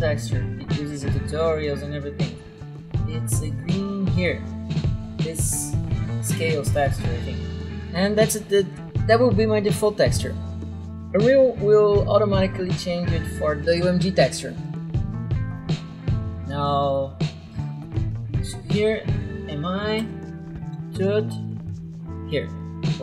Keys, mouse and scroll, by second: 0.0-0.3 typing, 1.8 right click, 3.0 right click, 4.3 click, 15.5 click, 17.8 click, 19.3-21.2 typing.